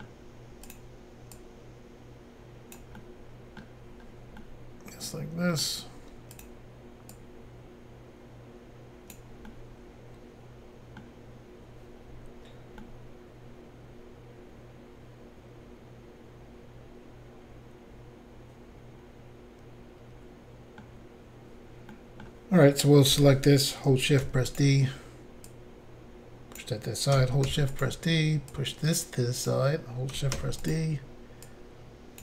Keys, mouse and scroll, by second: 0.7 click, 1.4 click, 3.0 middle click, 4.0 scroll down 1, 4.4 middle click, 6.4 click, 7.2 click, 9.5 middle click, 12.2 scroll down 2, 12.9 middle click, 21.9 middle click, 23.1 a, 24.2 d, 24.6 click, 25.5 click, 27.5 d, 27.7 click, 27.8 click, 28.5 click, 30.3 d, 30.6 click, 30.7 click, 31.5 click.